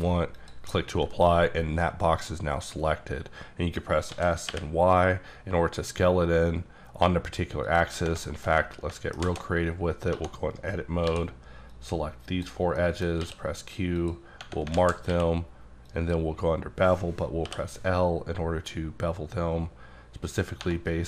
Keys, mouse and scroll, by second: 0.4 click, 4.1 s, 4.5 y, 7.7 click, 7.9 Tab, 8.3 shift+middle click, 9.2 alt+z, 9.6-10.1 scroll up 3, 10.1-11.1 typing, 11.7 click, 12.8 middle click, 13.2 q, 14.0 click, 14.8 alt+z, 15.1 q, 15.9 click, 17.5 l, 18.2-19.5 scroll up 10, 20.6 1.